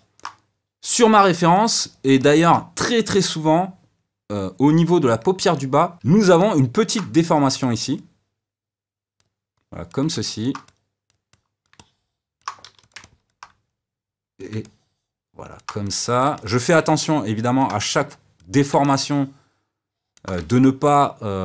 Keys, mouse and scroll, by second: 7.2 f, 8.0-10.1 drag, 10.1 middle click, 10.7-11.7 drag, 11.7 middle click, 12.6 f, 13.0 middle click, 13.7 click, 14.6-15.8 middle drag, 15.8 click, 16.3-18.0 middle drag, 18.0 click, 18.8-21.4 middle drag.